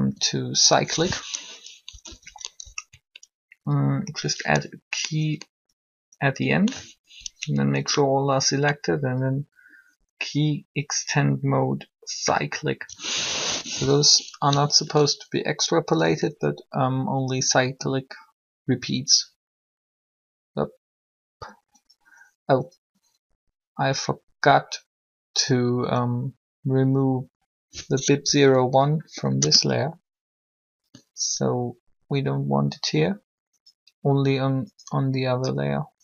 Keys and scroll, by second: 1.8 Up, 13.1 3, 15.1 3, 28.8 Delete, 29.2 Return.